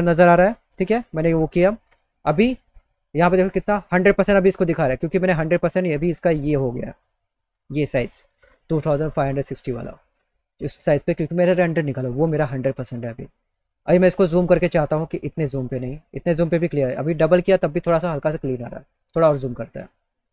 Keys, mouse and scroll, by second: 0.4 click, 2.5 click, 14.6 middle click, 18.6 middle click, 19.6 middle click, 20.1 middle click, 20.1 scroll.